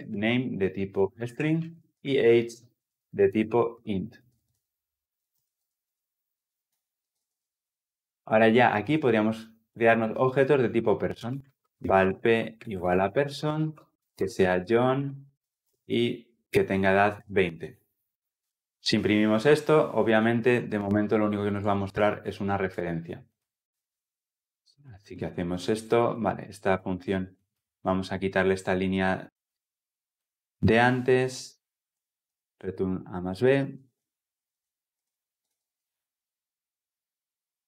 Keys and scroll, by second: 7.0 ctrl+alt+l, 35.3 ctrl+alt+l, 35.4 ctrl+alt+o.